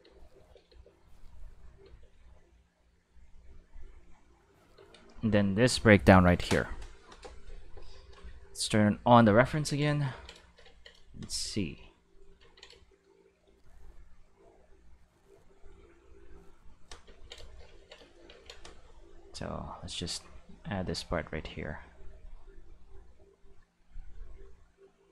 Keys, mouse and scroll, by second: 0.0 space, 0.4 space, 0.5 click, 0.7 space, 1.8 space, 2.0 click, 2.2 space, 3.5 space, 3.9 click, 4.1 space, 4.8 space, 5.1 click, 6.4 ctrl+s, 9.2 click, 10.0 ctrl+shift+middle click, 13.4-15.6 drag, 16.2 click, 19.8-21.0 drag, 23.0-24.8 drag.